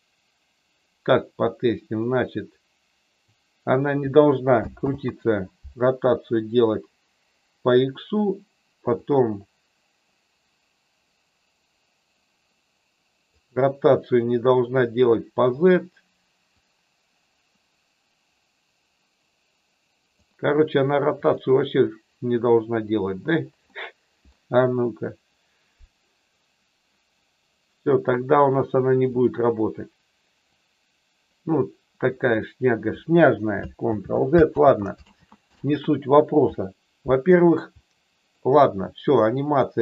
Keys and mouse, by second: 4.8 ctrl+z, 9.0-13.4 drag, 16.5-20.1 drag, 21.1 click, 23.6 middle click, 29.1 click, 30.5-32.3 drag, 33.9 ctrl+z, 37.7 middle click.